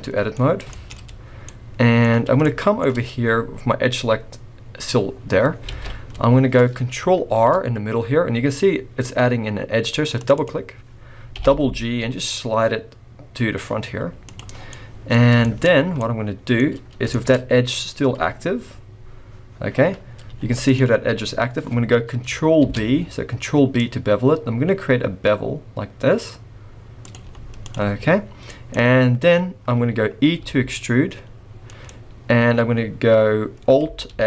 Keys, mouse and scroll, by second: 0.0 middle click, 0.4-1.4 scroll up 3, 0.7 shift+middle click, 1.4 middle click, 1.4-2.3 scroll up 1, 2.4 shift+middle click, 5.4 scroll down 2, 5.6 alt+a, 6.0-6.9 scroll up 2, 7.3 ctrl+r, 11.3 g, 14.5-15.1 scroll down 6, 14.7 middle click, 15.2-16.1 scroll up 4, 15.4 shift+middle click, 16.0 middle click, 16.6 scroll up 1, 17.1 middle click, 17.3 scroll up 1, 20.0 scroll down 1, 20.2 z, 21.4 scroll up 2, 22.6 ctrl+b, 27.2 z, 27.9-28.3 scroll down 3, 28.5 middle click, 28.7-30.3 scroll up 1, 30.6 e, 34.1 alt+s.